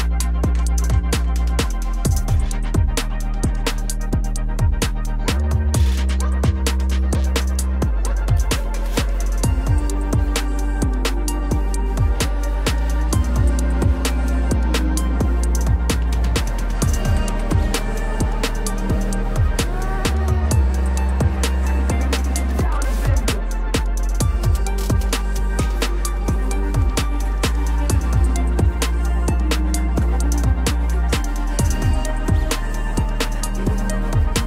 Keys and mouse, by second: 0.2 Tab, 1.0 g, 4.7 middle click, 5.5 Tab, 6.6 shift+d, 6.9 g, 7.8 z, 8.1-8.5 shift+middle drag, 9.0 g, 9.1 z, 11.8-14.2 middle drag, 15.4 shift+d, 15.9 g, 16.0 z, 16.8 middle click, 17.4-17.7 shift+middle drag, 19.2 g, 19.4 z, 21.1 middle click, 21.8 Tab, 22.1 middle click, 22.7 click, 23.3 g, 23.4 z, 26.3 shift+click, 26.8 click, 27.2-28.7 middle drag, 28.9 shift+middle drag, 30.9-32.1 drag.